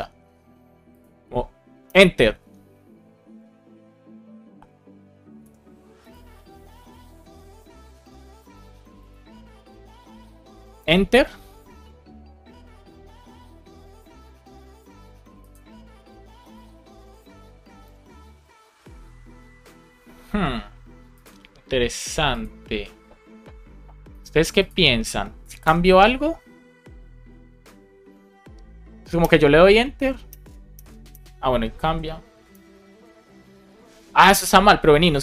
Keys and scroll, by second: 1.8 Return, 5.3 Escape, 10.7 Return, 17.7 Return, 25.5 Return, 29.1 Return, 30.6 Return, 31.7 Escape, 32.4 Return, 34.0 Escape.